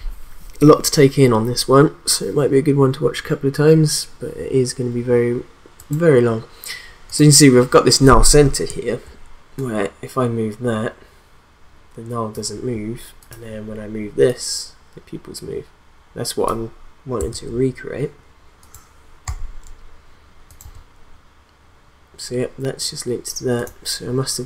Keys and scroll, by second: 17.3 ctrl+z, 19.2 p.